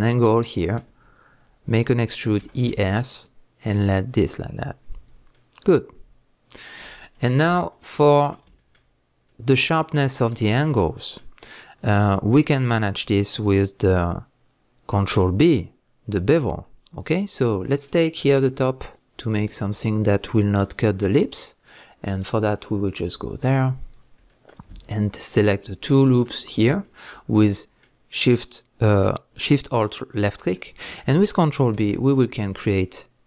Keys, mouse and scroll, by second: 2.4 e, 5.1 click, 5.3-18.9 middle drag, 9.0 scroll up 2, 9.7-10.1 scroll down 2, 11.8-12.1 scroll up 1, 18.9 alt+click, 20.0 alt+shift+click, 20.5-22.6 middle drag, 22.6 click, 23.8 alt+click, 24.3-25.3 middle drag, 25.3 alt+shift+click, 25.8-33.2 middle drag, 26.5 scroll up 1.